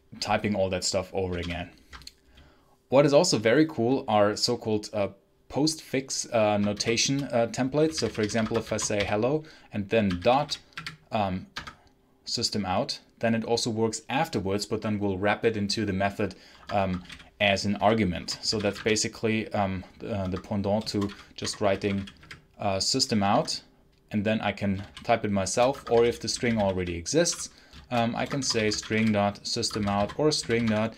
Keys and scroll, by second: 1.3 ctrl+alt+l, 6.6-11.1 typing, 11.4 Tab, 16.4 Escape, 16.6-19.1 typing, 18.1 Return, 20.1 Escape, 21.0-22.6 typing, 23.2 Tab, 24.7-30.8 typing, 28.1 Escape.